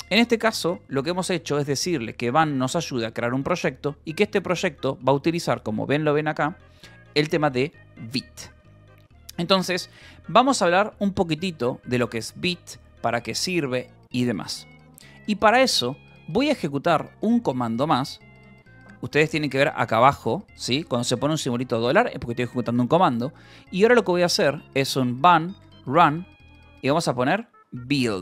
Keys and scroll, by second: 0.0 k, 0.2 j, 5.9 Return, 7.3 ctrl+h, 8.2-11.7 typing, 9.2 Escape, 19.1 :, 21.9 shift+1, 24.5-28.2 typing.